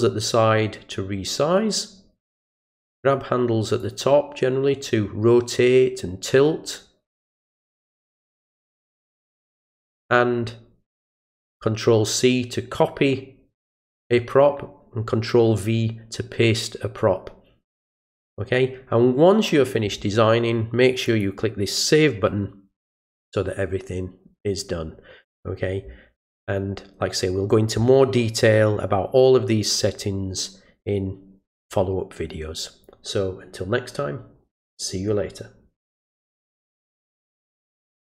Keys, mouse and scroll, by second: 3.8-8.2 drag, 8.8-10.1 drag, 21.0 click, 37.3 click, 38.0 click.